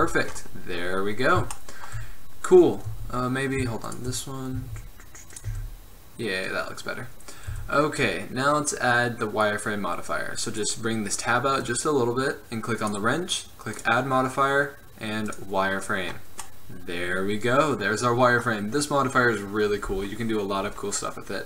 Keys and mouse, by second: 0.0 z, 0.2 middle click, 3.0 Tab, 4.0 click, 4.7 s, 5.6 Tab, 7.6 n, 9.7 click, 12.9-15.4 drag, 16.2-18.1 middle drag.